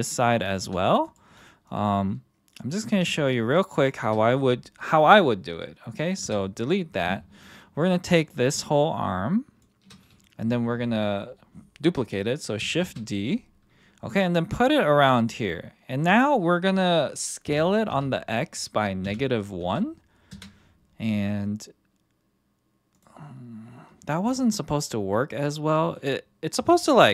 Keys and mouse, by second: 0.6 r, 1.8-2.8 drag, 3.4-3.9 shift+drag, 6.2 Delete, 7.6-8.4 drag, 8.7-9.6 shift+drag, 12.9 shift+d, 17.4 s, 17.9 x, 19.0 KP_Subtract, 19.6 KP_1, 20.3 KP_Enter, 24.5-25.9 middle drag, 26.5 KP_1.